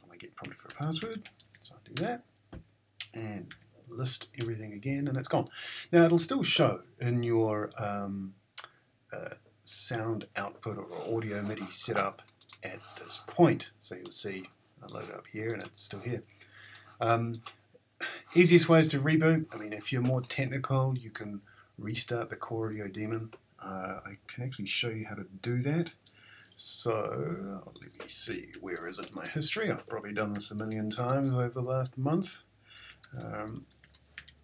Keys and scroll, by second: 3.3-4.1 typing, 4.4 Return, 27.8-31.4 typing, 32.6-34.4 typing.